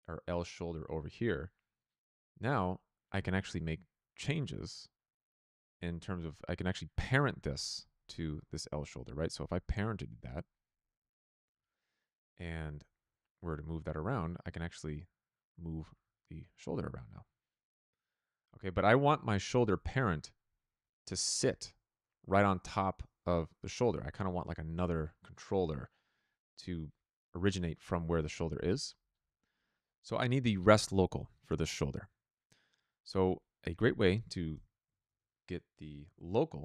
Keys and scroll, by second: 11.4 n, 28.5 n, 34.4 Tab, 34.8-36.6 typing.